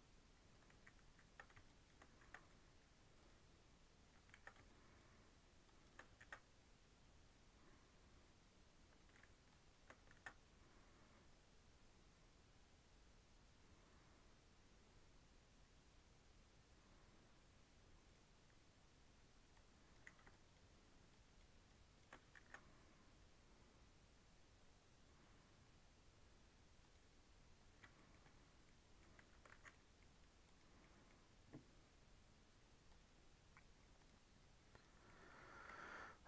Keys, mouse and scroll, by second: 0.6 ctrl+z, 1.0 ctrl+z, 1.6 shift+click, 2.1 ctrl+b, 4.2 ctrl+z, 4.6-6.1 shift+drag, 6.1 ctrl+b, 9.4 shift+click, 10.0 ctrl+b, 19.4 click, 21.0 shift+click, 21.6 shift+click, 22.3 ctrl+b, 27.4-27.9 scroll up 1, 27.9 shift+middle click, 28.2-28.6 scroll down 4, 28.6 middle click, 29.1 Tab, 29.2 scroll up 2, 29.4 alt+z, 29.6-30.0 middle drag, 30.0-30.7 right drag, 30.7-32.8 middle drag, 32.8 click, 33.9 click, 35.0 middle click, 35.3-35.8 scroll down 3.